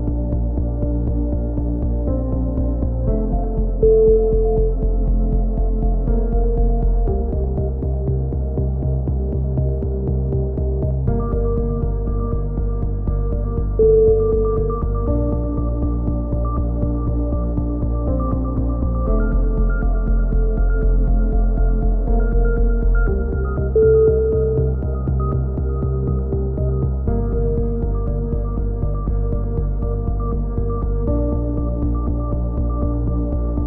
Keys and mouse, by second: 2.1 Tab, 2.3-2.9 drag, 3.8-4.4 drag, 6.7-7.9 drag, 8.1-8.6 drag, 8.4 z, 8.9-9.3 middle drag, 9.3 a, 9.4 z, 9.7 z, 10.6-11.5 middle drag, 12.0 a, 12.1 z, 12.4 Tab, 14.4-15.0 middle drag, 15.3 Tab, 15.6 z, 16.3-16.7 middle drag, 16.3 z, 16.4 z, 16.7-17.9 drag, 17.9-18.9 middle drag, 18.5 f, 18.7 a, 18.9-19.5 drag, 23.3 ctrl+z, 23.5 ctrl+z, 23.6 a, 23.8 middle click, 24.4 click, 25.3-26.3 drag, 26.3 middle drag, 26.3 KP_3, 26.6-27.4 drag, 28.6 ctrl+l, 28.6 click, 28.9 h, 29.3 KP_3, 30.8 k, 33.4-33.6 drag.